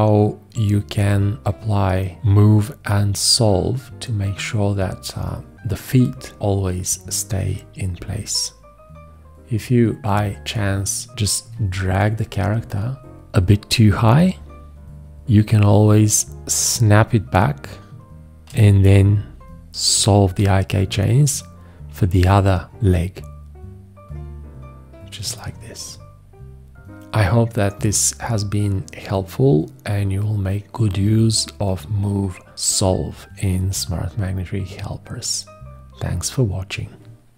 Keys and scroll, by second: 11.5 x, 18.5 v.